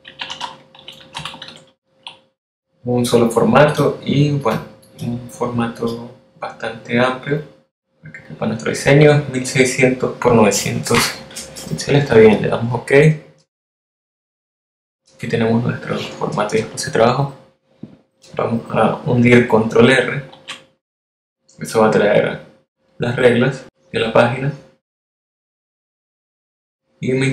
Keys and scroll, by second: 0.0-1.2 typing, 19.6 super+r.